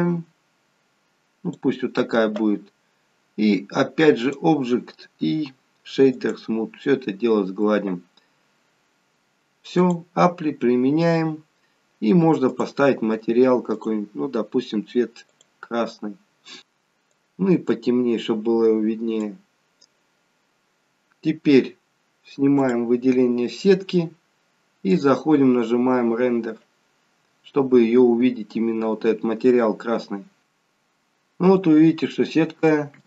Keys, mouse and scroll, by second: 4.3 click, 9.9 click, 12.8 click, 13.8 click, 22.4 scroll down 3, 22.7 click, 23.2 scroll down 2, 23.6-25.0 scroll up 2, 26.8 click, 30.5 shift+middle click, 30.5-32.8 scroll up 24.